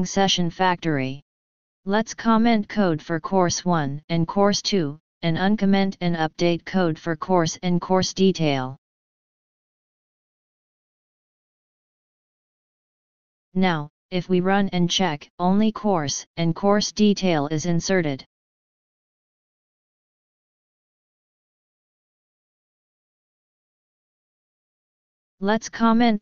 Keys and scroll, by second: 0.8 ctrl+shift+o, 5.0 ctrl+shift+/, 6.0 ctrl+/, 10.3 ctrl+d, 12.1 ctrl+d, 13.2 ctrl+s, 25.4 ctrl+d, 25.9 ctrl+z.